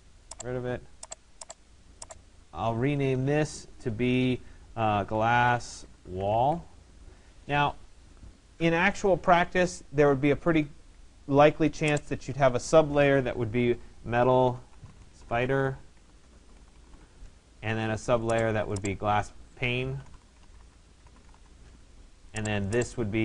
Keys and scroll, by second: 7.0 Return, 15.9 BackSpace.